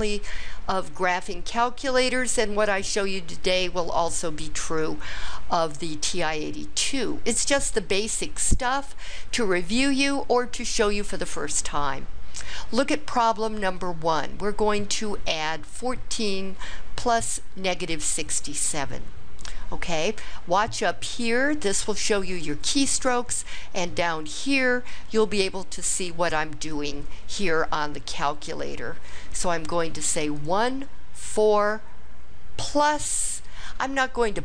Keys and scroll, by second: 30.4 1, 31.2 4.